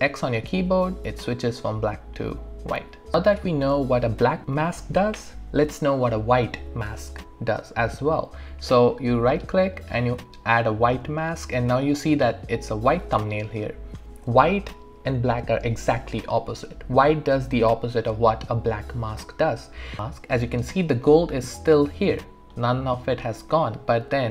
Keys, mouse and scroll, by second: 1.1 x, 2.8 x, 3.1-4.2 alt+drag, 8.8 right click, 10.1 click.